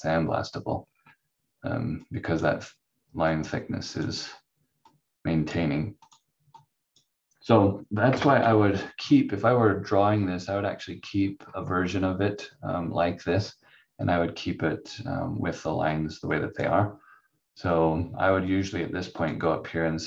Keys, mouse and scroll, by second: 0.7-1.4 scroll down 1, 2.1 click, 8.1 Delete, 8.4 F4, 10.2 click, 11.2-11.7 scroll up 1, 12.4 click, 15.9 click.